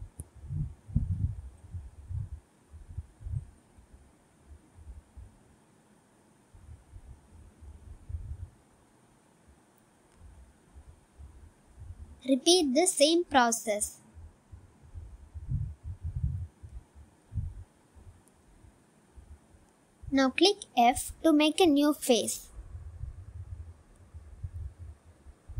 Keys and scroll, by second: 0.3 s, 19.0 s, 20.1 e, 21.4 s, 24.4 f.